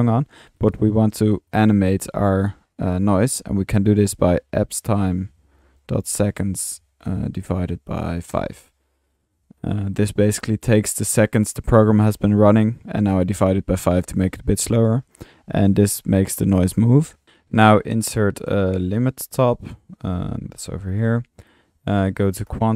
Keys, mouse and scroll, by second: 0.0-0.3 drag, 0.6 click, 1.5-1.8 drag, 2.9-3.3 drag, 13.0 drag, 14.6 middle click, 17.0-17.7 typing, 19.2 Tab.